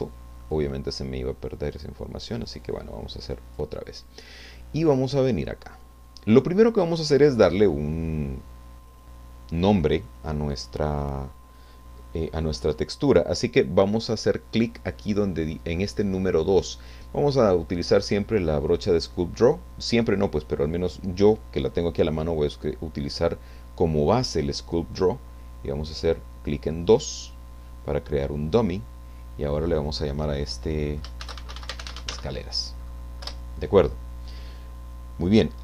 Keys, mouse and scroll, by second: 1.8-3.7 drag, 26.8 click, 28.5-31.0 drag, 30.9-32.6 typing, 33.3 Return.